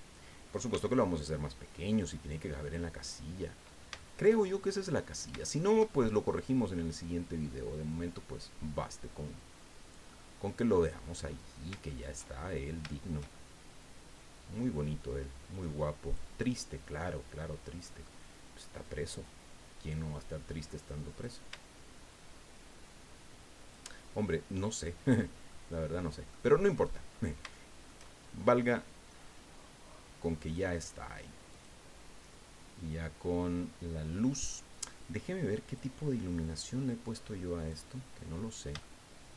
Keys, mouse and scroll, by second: 0.7 s, 2.6 click, 3.1 middle click, 3.9-5.0 shift+drag, 5.4-6.4 shift+middle drag, 7.4-11.2 drag, 11.9 shift+middle click, 12.9 shift+middle click, 12.9-14.7 shift+drag, 15.5 click, 16.4-18.2 drag, 19.2-21.4 drag, 22.1-23.9 shift+drag, 24.3 shift+click, 25.2 scroll down 2, 25.5-26.5 drag, 26.8 click, 27.5 shift+click, 30.4 click, 31.5 click, 35.7 click, 37.6 click, 38.3-38.6 scroll down 1, 38.8 shift+middle click.